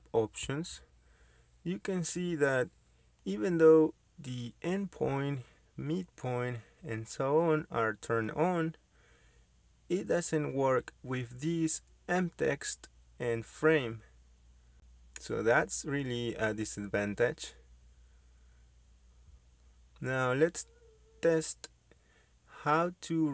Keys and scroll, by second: 23.1 Escape.